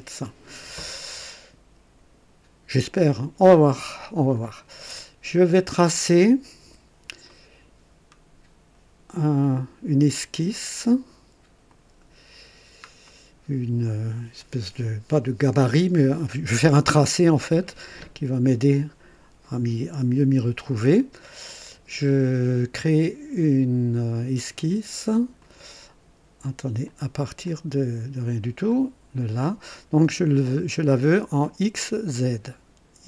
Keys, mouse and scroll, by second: 3.9 scroll down 2, 5.5 scroll down 2, 6.6 &, 7.2 right click, 11.9 click, 12.4-12.7 scroll down 1, 13.0-13.8 right drag, 17.4 scroll up 1, 18.0-18.5 right drag, 21.0-21.7 right drag, 25.4 click, 26.8 click, 27.4 click, 28.6 click.